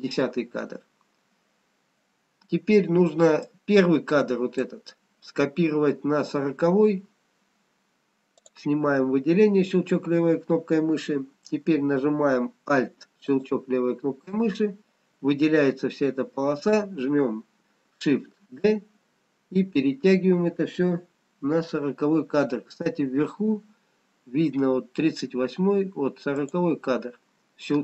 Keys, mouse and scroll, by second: 3.8 click, 8.5 click, 13.4 alt+click, 18.5 shift+d.